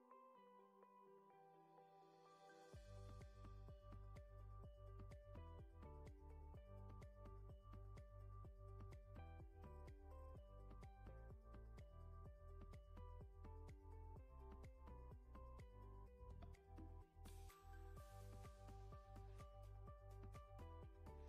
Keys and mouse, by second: 3.4 click, 5.0 right click, 8.0 middle click, 9.1 z, 11.4 KP_5, 14.9 middle click, 19.2 middle click, 20.0 middle click.